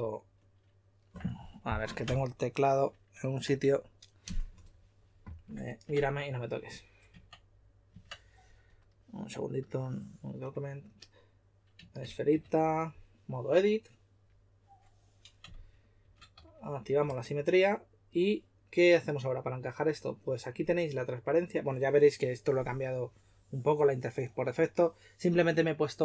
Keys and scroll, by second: 7.1 Tab, 7.1 typing, 7.9 Tab, 15.3-17.5 typing.